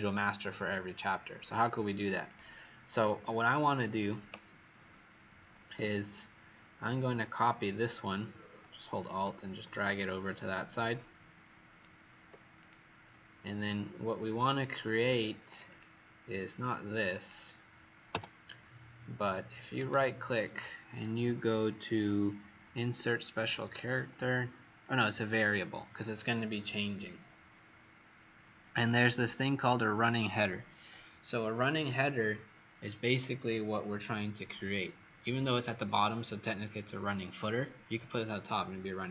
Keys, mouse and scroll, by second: 2.2 click, 5.7 w, 8.9 alt+click, 12.5 click, 16.5 click, 18.0 Delete, 19.7 right click.